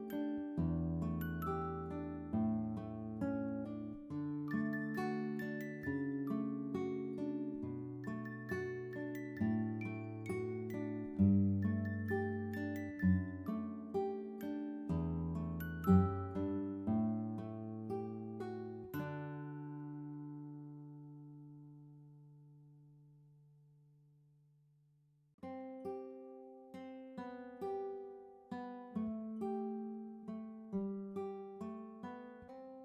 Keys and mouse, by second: 0.5 click, 3.4 click, 4.7 click, 4.8 click, 9.4 click, 10.3 click, 12.9 click, 13.8 click, 17.9 click, 19.6 click, 20.6 click, 22.0 click, 24.9 click, 27.1 click, 28.8 click, 29.9 click, 30.4 BackSpace, 31.3 4, 32.2 BackSpace, 32.6 2.